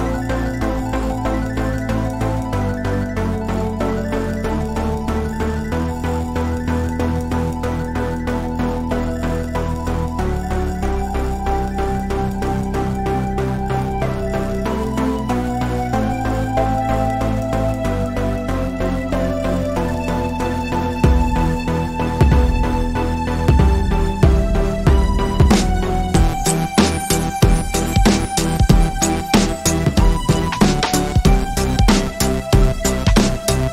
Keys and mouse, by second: 1.6-2.4 middle drag, 2.8 a, 5.0 right click, 5.5 Tab, 6.0 right click, 6.6 KP_1, 7.1 z, 7.8-8.3 middle drag, 9.3-10.3 middle drag, 10.8-11.2 middle drag, 13.7-14.2 middle drag, 14.7 Tab, 15.7 z, 18.5-25.0 drag, 22.8 x, 25.0 z, 25.6 drag, 27.6 ctrl+a, 31.7 Tab, 32.6 Tab, 33.0 z, 33.3 a.